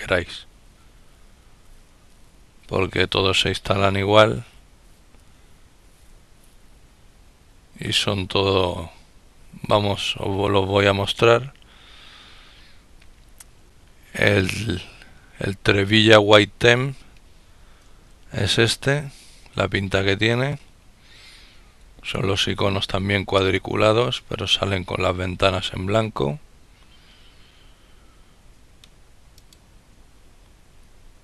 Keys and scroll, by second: 17.5 ctrl++, 18.2 ctrl++.